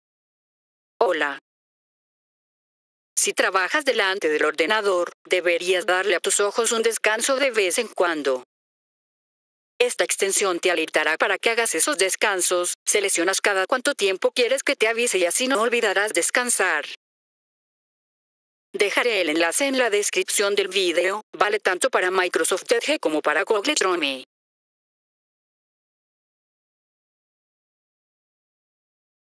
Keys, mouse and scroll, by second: 0.9 click, 8.2-9.6 scroll down 2, 9.6-10.2 scroll down 1, 20.7 click, 22.5-24.1 drag, 26.2 click.